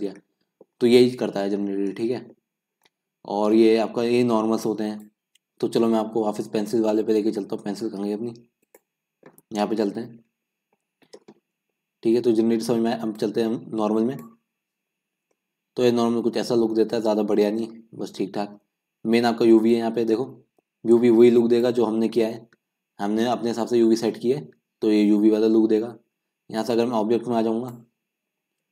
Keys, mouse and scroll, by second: 0.0 click, 0.2-1.7 middle drag, 1.7-2.0 scroll down 1, 2.0 middle click, 2.8-4.8 scroll up 4, 4.8-5.1 scroll up 1, 5.1-6.2 scroll down 10, 6.2-7.0 scroll down 5, 7.0-7.3 scroll up 4, 7.3-8.8 middle drag, 8.8 click, 9.8 KP_Decimal, 11.5 scroll up 3, 11.8-14.2 middle drag, 14.2-14.8 drag, 14.8-15.5 scroll down 2, 15.5 middle click, 16.2-16.7 scroll up 1, 16.7 scroll down 2, 17.0-21.6 middle drag, 21.6-28.7 drag.